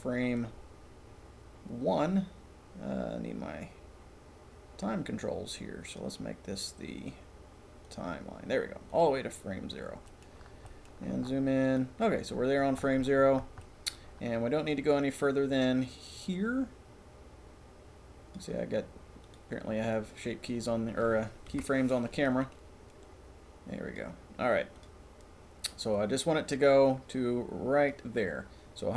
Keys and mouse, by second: 5.9 click, 18.5 drag, 21.5 Delete, 22.5-24.3 drag, 24.7-25.0 drag, 26.1 click.